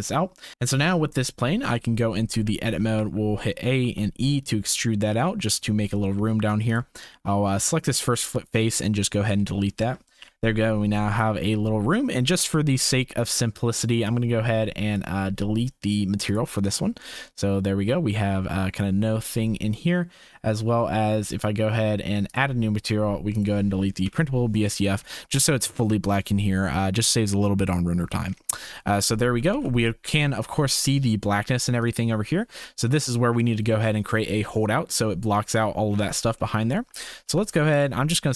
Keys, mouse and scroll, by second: 0.5 ctrl+s, 1.6 click, 2.3 Tab, 2.9 a, 3.8 e, 6.0 click, 6.3 3, 6.7 click, 7.8 x, 9.4 shift+click, 9.8 Tab, 10.2 KP_0, 11.1 shift+click, 12.9 ctrl+s, 14.1 click, 16.3-17.6 drag, 22.3 click, 24.0 Delete, 25.2 Delete, 25.4 shift+click, 28.9 shift+click, 29.9 ctrl+s, 30.3 shift+click, 31.8 click, 32.9 click, 36.5 shift+click, 36.8 Tab, 37.2 2, 37.9 alt+click.